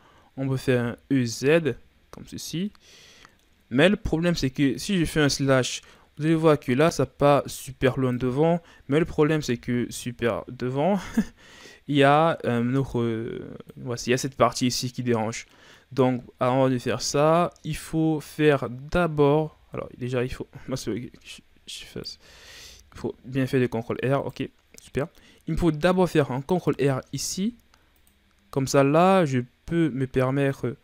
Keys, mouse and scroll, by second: 0.3 e, 2.6-4.8 middle drag, 4.8 KP_Divide, 5.9-7.2 middle drag, 7.2-8.7 drag, 8.7 KP_Divide, 9.9-10.3 scroll down 2, 10.3-12.9 middle drag, 12.9-15.3 drag, 15.3 scroll down 2, 15.5 middle click, 16.0-16.7 scroll up 3, 16.7 ctrl+z, 17.1 ctrl+z, 17.6 ctrl+z, 18.7-19.2 scroll up 2, 19.2 ctrl+z, 20.8 g, 22.2 ctrl+z, 22.5 ctrl+z, 23.4-24.1 scroll down 1, 24.1 right click, 24.9-26.6 middle drag, 26.6 ctrl+r.